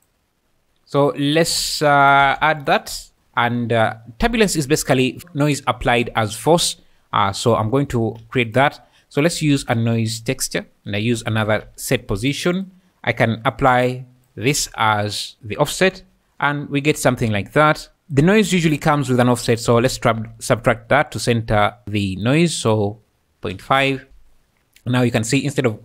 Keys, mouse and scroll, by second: 0.0 click, 3.4 click, 8.2 shift+a, 11.0 shift+a, 12.6 click, 13.5 click, 15.8 space, 17.6 Escape, 18.5 shift+a, 21.6 click, 21.8 click, 22.7-23.8 drag, 24.1 space.